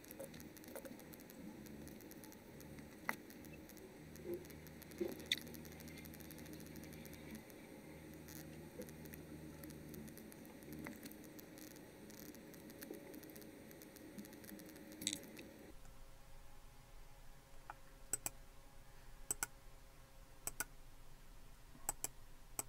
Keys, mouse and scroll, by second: 0.0-1.5 typing, 0.0 click, 0.4 click, 1.0 click, 1.2 right click, 1.3 click, 1.6 click, 2.1 click, 2.6 right click, 2.6 click, 3.3 click, 3.7 click, 4.1 click, 4.4 click, 5.1 click, 5.8-7.2 drag, 7.3 click, 8.3 right click, 8.4 click, 8.8 click, 9.2 scroll down 2, 9.7 click, 9.9 click, 10.2 click, 11.4 click, 11.5 click, 12.1-13.2 drag, 13.3 click, 13.9 click, 14.1 click, 14.7 click, 15.2 click, 18.1 right click, 18.3-20.4 drag, 20.4 right click, 20.6-21.8 drag, 21.8 right click, 22.1 click.